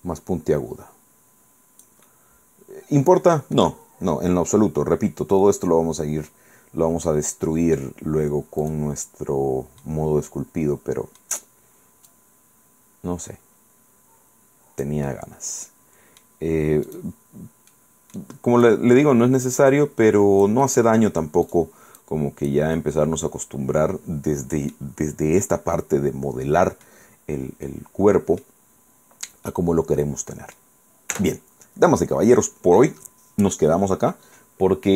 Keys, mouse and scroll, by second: 2.2-3.6 middle drag, 5.5-8.1 middle drag, 8.8 right click, 9.2 middle click, 10.4-11.5 drag, 12.2-15.2 drag, 15.2-16.5 middle drag, 17.0 click, 17.8 middle click, 18.8-20.8 drag, 20.8 middle click, 21.6 click, 22.1 click, 22.9 scroll down 1, 25.2 scroll down 1, 25.6-27.2 middle drag, 27.2 scroll down 1, 27.8 middle click, 28.8-29.2 scroll up 1, 29.6-30.9 drag, 31.2 Tab.